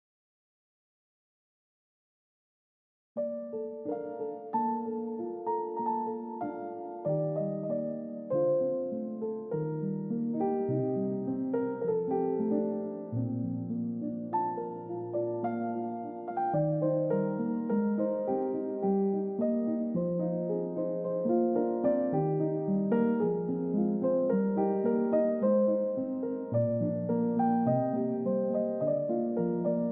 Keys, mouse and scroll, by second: 3.5 typing, 5.7 typing, 8.2 double click, 8.6-9.3 scroll down 1, 9.3-10.3 scroll up 1, 12.0 scroll up 1, 13.6-14.1 scroll down 1, 22.7 4, 23.1 Return, 26.1 2, 26.5 Return, 27.3 ctrl+z, 28.8-29.2 scroll down 1.